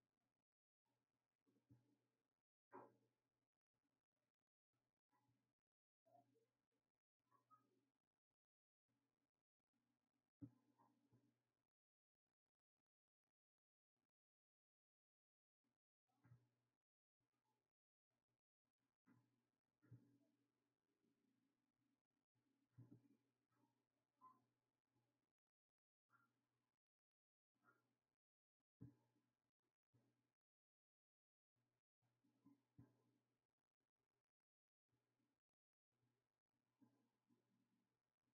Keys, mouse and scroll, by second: 2.9-8.3 drag, 12.2-24.1 drag, 25.0 click, 27.6 click, 30.2 click, 33.6-35.9 drag, 37.6 click.